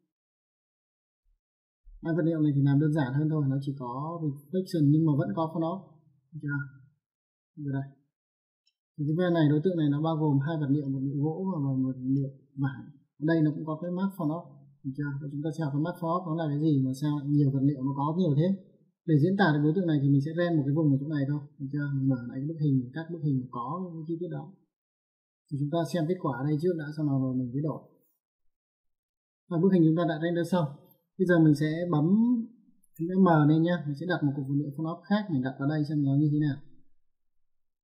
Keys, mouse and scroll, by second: 0.1 click, 1.3 middle click, 3.3 middle click, 7.2 click, 8.0 click, 8.4 middle click, 11.5 middle click, 14.0 click, 15.0 click, 18.7 click, 22.6 click, 24.9 click, 31.6 click, 32.9 m, 36.2 click.